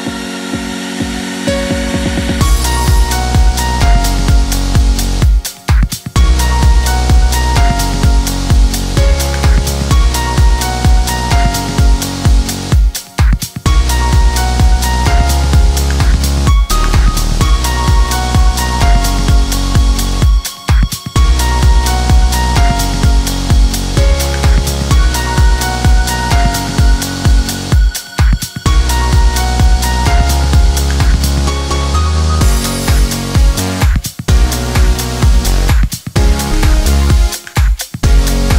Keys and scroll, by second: 11.9 1.